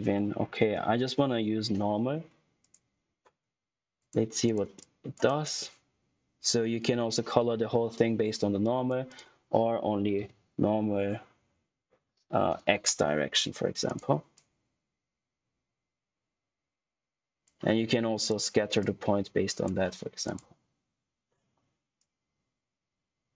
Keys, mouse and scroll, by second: 3.7 click, 5.2 right click, 5.5 click, 10.1 ., 11.3 y, 12.8 x, 13.8 click.